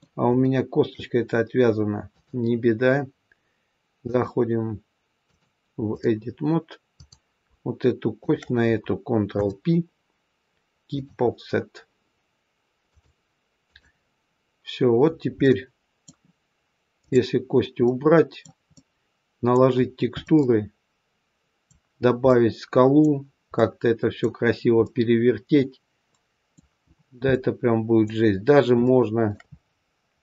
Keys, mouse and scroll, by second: 0.3 shift+middle click, 2.0 click, 6.8 click, 8.1 shift+click, 8.3 shift+click, 9.3 ctrl+p, 12.9 click, 15.3 middle click, 16.9 click, 17.5-17.8 scroll down 2, 17.8 middle click, 18.7 middle click, 19.7-20.1 scroll up 1, 20.2 middle click, 22.2 middle click, 26.8 middle click, 26.8-27.3 scroll up 3, 27.2 middle click, 28.8 shift+middle click, 29.4-30.2 scroll up 4.